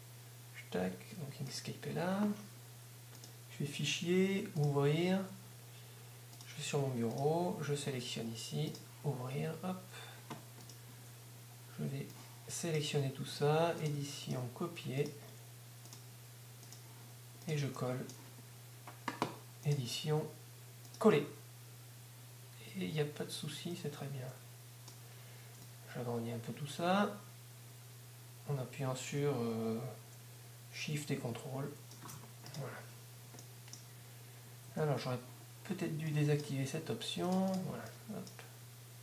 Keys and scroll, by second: 36.9 ctrl+z.